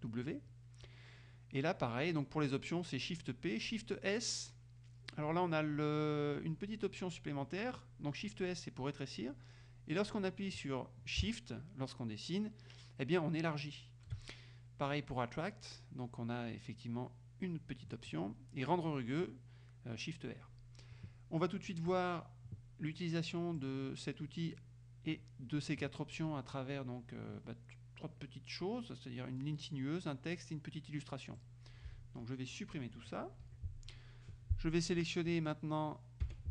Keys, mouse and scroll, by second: 22.0 click, 23.6 click, 31.4-33.2 drag, 33.5 Delete, 36.3 F6.